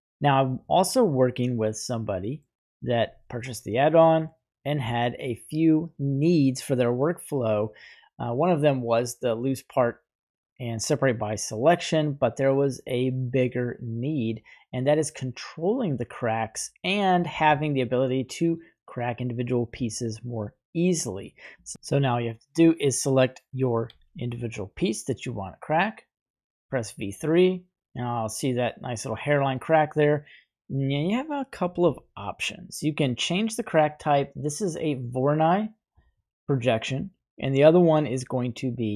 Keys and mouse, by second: 0.5-2.4 middle drag, 14.8-16.6 middle drag, 20.4-21.5 middle drag, 22.7 right click, 23.8 g, 24.9 right click, 26.1 click, 26.4 typing, 30.6-31.6 middle drag, 36.2-38.9 middle drag.